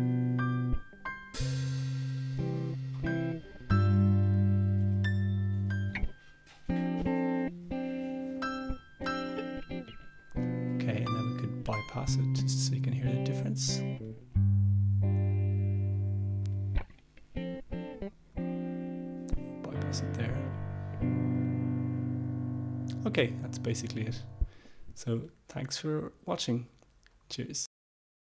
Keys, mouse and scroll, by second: 0.6-5.2 drag, 8.5-9.8 drag, 14.1 click, 16.6 click, 18.5 click, 20.1 click, 21.5 click, 23.1-24.4 drag, 25.3 click.